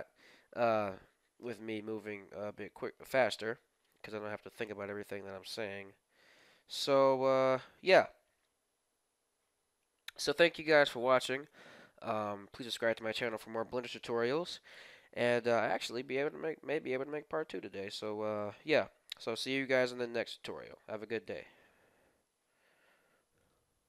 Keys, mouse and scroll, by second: 4.7-6.3 middle drag.